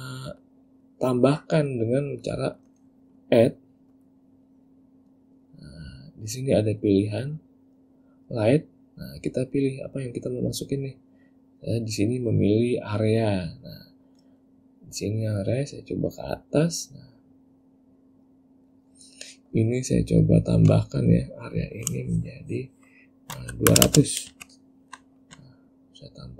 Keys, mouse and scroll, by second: 0.0 middle click, 0.6 click, 1.4 click, 2.4 click, 4.1 click, 15.6 click, 18.0 click, 20.4 click, 24.0 KP_0, 25.5 `.